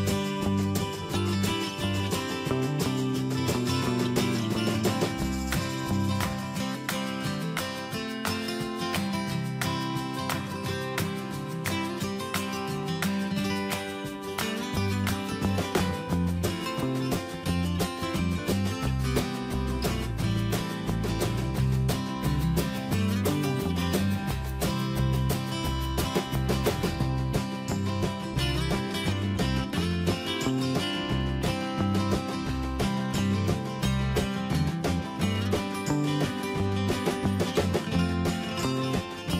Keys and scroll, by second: 6.7 ctrl+z, 12.0 Up, 20.1 Return, 20.7 Up, 25.5 ctrl+z, 30.7 ctrl+t, 33.3 ctrl+a, 35.2 ctrl+a, 35.9 ctrl+shift+., 36.9 ctrl+z, 38.5 ctrl+z.